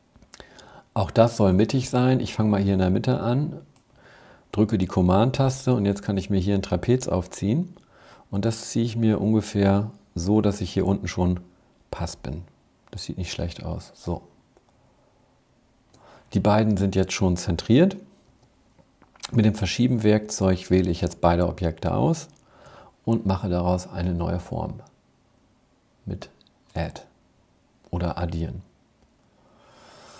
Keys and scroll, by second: 18.2 v.